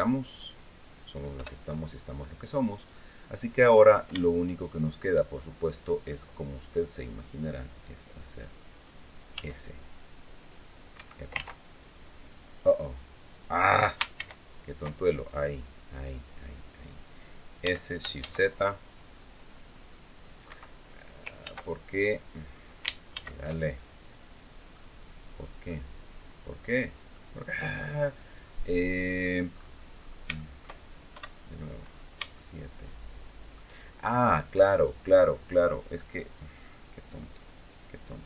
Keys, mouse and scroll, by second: 1.1 KP_7, 3.5 scroll down 2, 3.9 shift+click, 9.1 s, 10.7 Escape, 13.9 ctrl+shift+z, 17.4 s, 17.9 shift+z, 20.2 Escape, 21.2 ctrl+z, 22.9 ctrl+shift+z, 24.0 scroll down 2, 24.5-25.6 drag, 25.8-26.3 scroll down 2, 26.9-29.2 middle drag, 29.3-29.7 scroll up 1, 29.7-30.0 scroll down 1, 30.1 shift+middle click, 30.9 KP_7, 31.6-32.0 scroll up 1, 32.1 shift+middle click, 32.1-33.4 shift+drag.